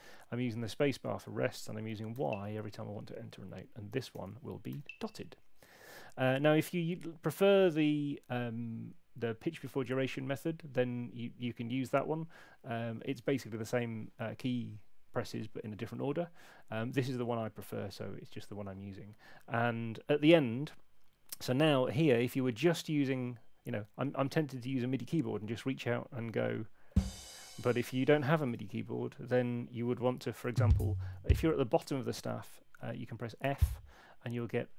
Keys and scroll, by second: 2.1 y, 3.6-4.6 typing, 26.4 6, 28.3 6, 28.3 super+z, 30.4 Down, 33.4 f.